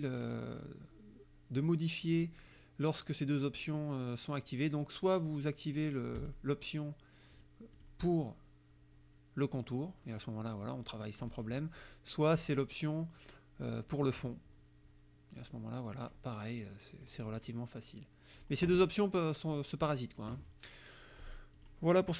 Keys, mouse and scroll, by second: 6.2 click, 7.4 click, 7.8 click, 9.7-11.4 drag, 12.3 click, 14.1 click, 15.4 click, 17.1 click, 21.2 click, 21.6 click.